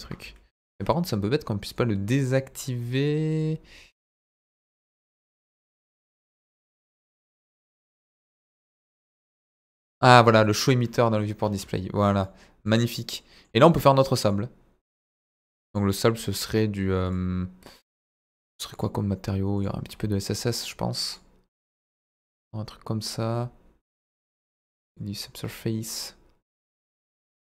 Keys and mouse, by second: 1.7 click, 3.3 click, 4.7-5.5 drag, 6.5-7.7 drag, 9.4 click, 10.1 click, 10.7 click, 12.2-12.7 middle drag, 13.1-13.6 middle drag, 14.3-15.4 drag, 15.7 click, 19.5 click, 25.0-27.5 drag.